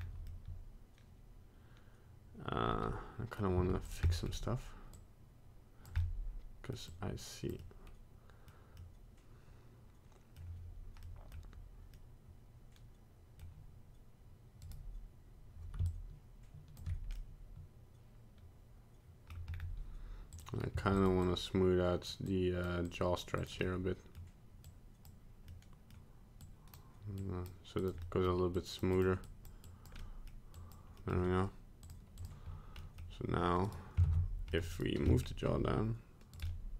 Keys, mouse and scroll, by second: 0.0 scroll up 2, 0.3 middle click, 3.6 f, 4.1 middle click, 5.0 click, 6.0 middle click, 6.7 middle click, 6.9 click, 7.6 middle click, 8.8 middle click, 11.0 middle click, 11.9 middle click, 14.7 right click, 15.9 shift+click, 17.2 middle click, 19.5-20.3 scroll up 2, 20.3 click, 20.7 f, 21.3 click, 22.3 click, 22.9 click, 23.4 click, 23.6 middle click, 24.7 click, 25.5 middle click, 26.5 click, 27.2 click, 27.9 click, 28.0 middle click, 28.6 click, 29.0 click, 29.3 click, 29.7 click, 30.0 middle click, 30.6 click, 31.0 middle click, 31.9 click, 32.9 middle click, 33.7 right click, 34.1 ctrl+Tab, 34.5 middle click, 34.8 right click, 35.2 middle click, 35.5 r, 36.5 middle click.